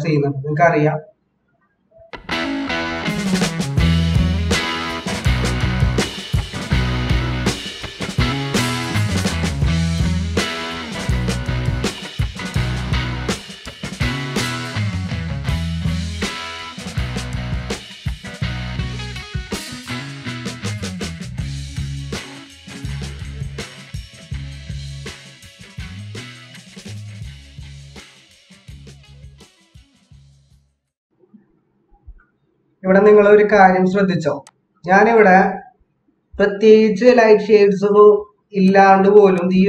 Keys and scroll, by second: 0.0 ctrl+=, 2.1 ctrl+=, 2.8 ctrl+-, 11.3 -, 12.1 ctrl+=, 23.9 ctrl+-, 24.5 ctrl+-, 24.8 ctrl+=, 30.5 ctrl+-, 35.1 ctrl+=.